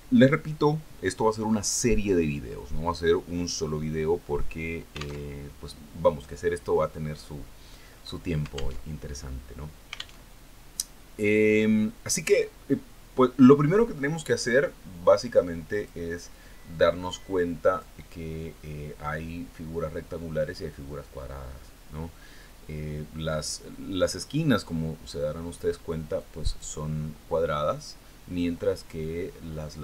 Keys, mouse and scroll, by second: 6.8 alt+Tab, 10.3 alt+Tab, 11.7 alt+Tab, 15.9-16.5 scroll up 2, 16.8 click, 18.0-18.4 scroll up 2, 18.6 click, 25.2-25.5 scroll down 2, 27.1 click, 27.7 click.